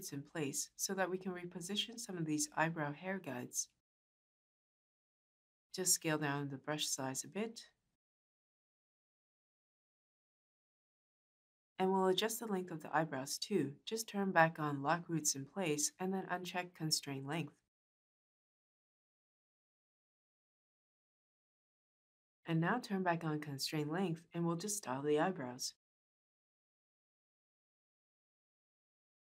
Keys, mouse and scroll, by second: 6.2-7.4 shift+drag.